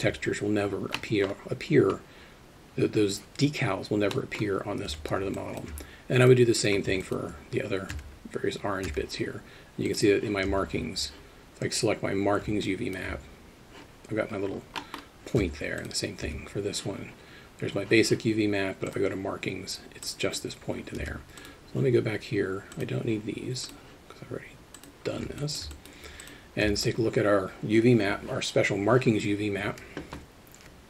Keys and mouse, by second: 1.0-1.3 middle drag, 4.1 middle click, 4.9 Tab, 5.4 alt+shift+middle drag, 7.0 alt+middle click, 8.9 Tab, 9.9 click, 10.5 Tab, 12.7 alt+shift+middle click, 14.8 middle drag, 15.4 Tab, 15.8 click, 16.3 Tab, 18.9 click, 20.1-20.4 drag, 21.0 Tab, 21.4 click, 24.8 click, 25.4 alt+shift+middle click, 25.7 alt+middle click, 26.7 Tab.